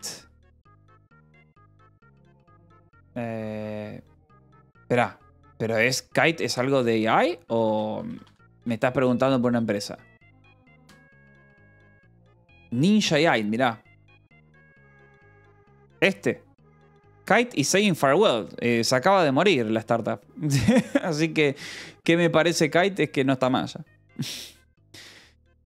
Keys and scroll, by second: 0.0-0.8 typing, 3.3 j, 6.1-8.7 typing, 10.1 j, 16.0 j, 24.6-25.6 typing.